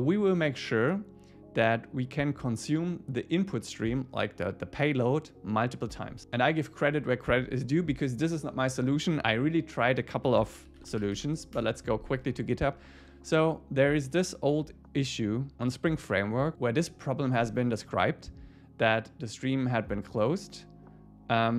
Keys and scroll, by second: 11.6 Return.